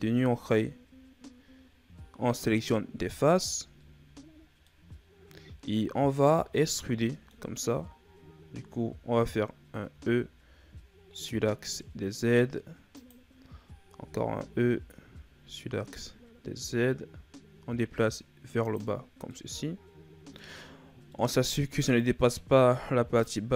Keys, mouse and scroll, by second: 3.4 shift+scroll up 1, 4.6-6.4 middle drag, 6.4-6.9 scroll down 2, 6.9 middle click, 7.6-9.8 scroll up 1, 9.8 e, 13.9 e, 19.0 scroll down 1, 19.2-20.6 middle drag, 20.6-21.0 scroll up 2, 21.0 middle click, 21.9 click, 23.3 scroll down 2.